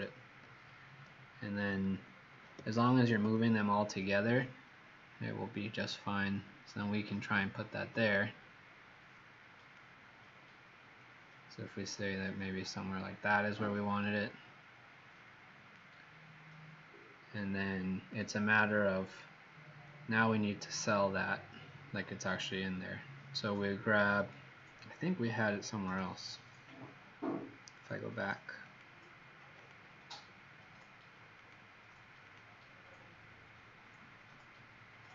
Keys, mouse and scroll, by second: 2.5 shift+click, 3.2 v, 3.7 click, 10.9 click.